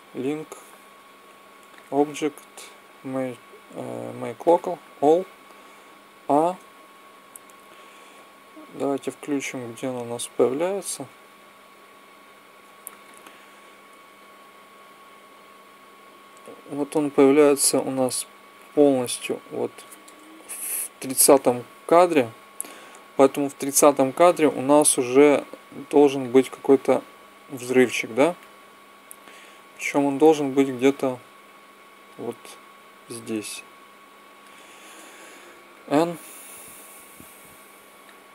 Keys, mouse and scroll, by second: 1.6-3.2 drag, 5.7 a, 9.6-15.7 drag, 20.6 Left, 26.0-27.8 drag, 30.0-31.8 drag, 32.9-34.6 drag, 35.2 n, 37.8 click.